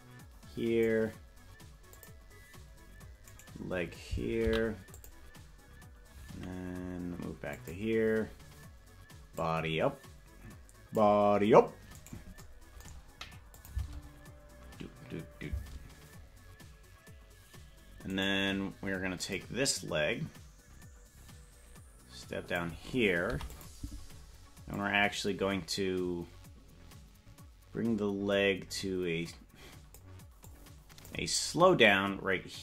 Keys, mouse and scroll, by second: 1.9 click, 4.4 right click, 4.4 i, 7.6 click, 9.3-11.0 drag, 12.0 right click, 13.6 click, 13.7 space, 16.1 space, 18.2 right click, 19.4-22.7 drag, 24.8-30.0 drag, 24.8 i, 30.5 click.